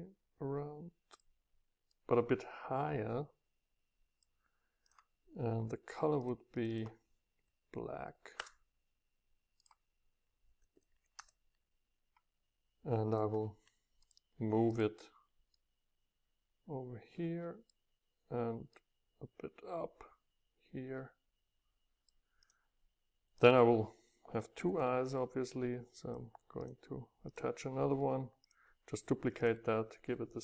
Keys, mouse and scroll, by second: 2.7 middle click, 3.3-6.5 middle drag, 6.6 middle click, 6.6 scroll down 2, 7.0 click, 8.3 Return, 9.6-11.1 drag, 11.1 Return, 13.1-15.5 middle drag, 19.2 click, 19.4 click, 19.6 click, 21.0-22.5 middle drag, 22.5-24.6 drag, 24.6 ctrl+d, 25.4-30.4 drag.